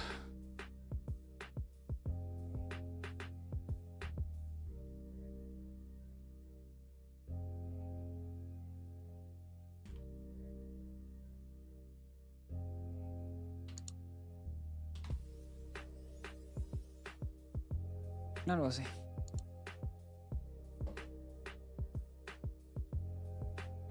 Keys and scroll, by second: 0.0 j, 0.6 k, 1.1 j, 6.7-15.1 typing, 12.3 Return, 12.5 Escape, 15.6 ctrl+s.